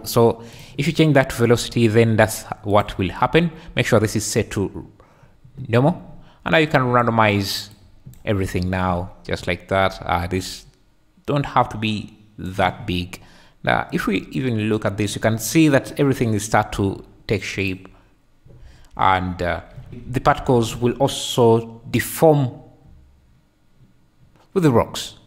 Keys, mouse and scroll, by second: 2.7-4.4 drag, 6.7 click, 7.0-7.8 middle drag, 7.8 click, 8.2-10.2 middle drag, 10.5-12.5 shift+drag, 19.3 `, 21.4-25.2 shift+drag.